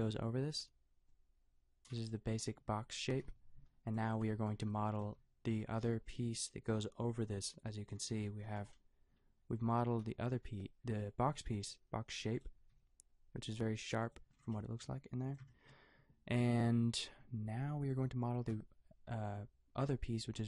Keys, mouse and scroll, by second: 2.1 a, 3.2 KP_5, 3.9 click, 5.1 g, 10.0 n, 11.5 g, 12.7 g, 14.8 g.